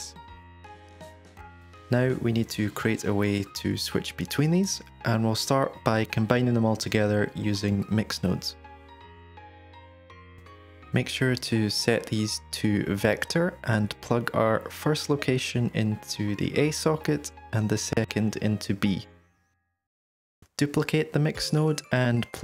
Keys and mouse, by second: 4.0 ctrl+right click, 9.7 shift+a, 13.4 click, 14.8-15.2 drag, 15.9-17.0 drag, 17.8-18.2 drag, 18.7-19.8 drag, 20.6 shift+d.